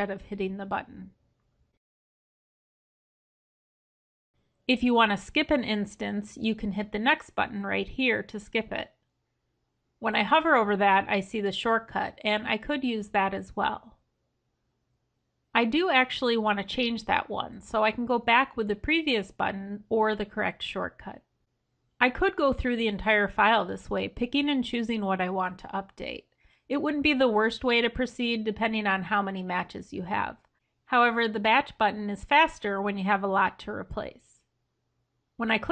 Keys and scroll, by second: 2.1 ctrl+h, 13.1 F3.